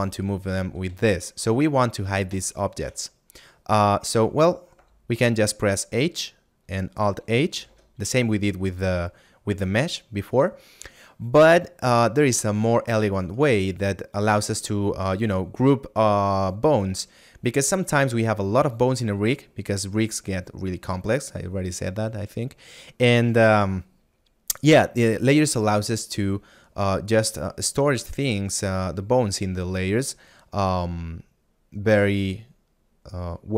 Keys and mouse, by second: 1.0 a, 1.7 right click, 5.6 middle click, 12.7 right click.